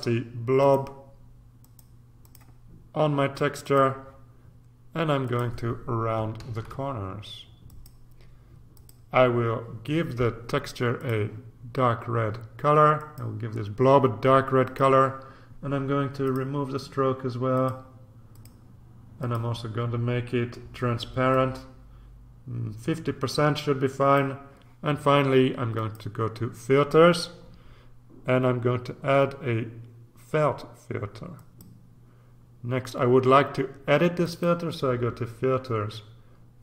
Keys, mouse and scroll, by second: 0.6 click, 1.6 click, 3.6 click, 5.2 click, 6.4 ctrl+a, 7.6 click, 8.7 click, 10.9 click, 12.9 click, 14.6 click, 16.2 click, 17.5 click, 18.3 click, 19.2 click, 21.3-24.7 drag, 25.8 click, 31.3 click, 34.2 click.